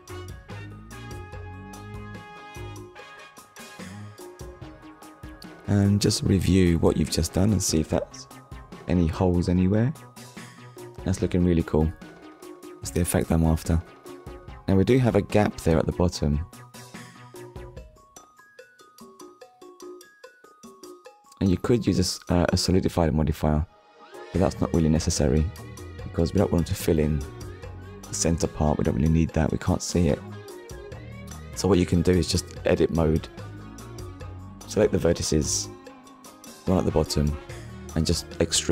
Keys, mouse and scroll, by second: 1.8 Tab, 2.8 click, 3.5 click, 4.0 scroll down 1, 4.5 middle click, 12.2 middle click, 13.5 scroll up 1, 14.2 middle click, 15.1 click, 23.3 click, 24.6 click, 25.6 click, 27.1 click, 28.6-29.0 scroll down 1, 29.2 click, 29.5 middle click, 32.0 click, 33.0 KP_1, 34.9 click, 35.5 shift+middle click, 36.8 click, 37.5 click, 38.4 scroll up 1.